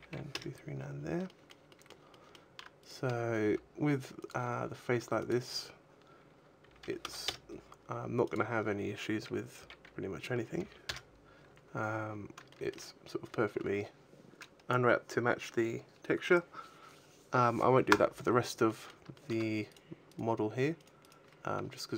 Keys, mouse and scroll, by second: 0.8 scroll down 4, 0.9 shift+middle click, 1.9 shift+middle click, 2.7 right click, 3.0-3.5 scroll up 3, 3.3 g, 4.2 click, 5.0 click, 8.1 click, 11.4 a, 11.6-12.3 scroll down 8, 12.4 shift+middle click, 18.6 middle click, 19.0 shift+middle click, 19.6 right click, 20.0 right click, 20.8 right click, 21.0 right click, 21.5-21.9 scroll down 3.